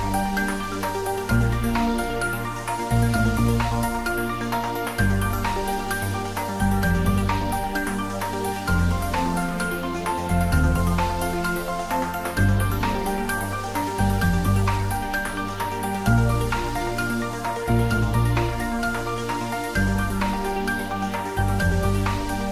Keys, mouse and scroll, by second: 4.0 click, 4.7 scroll down 1, 5.2-9.1 middle drag, 22.3 click.